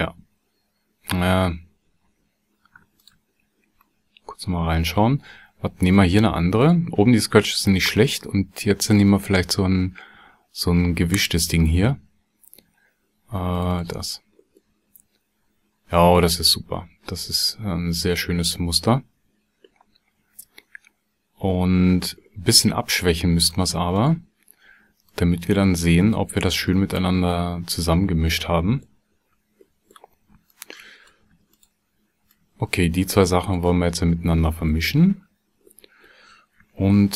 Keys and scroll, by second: 36.9 shift+a.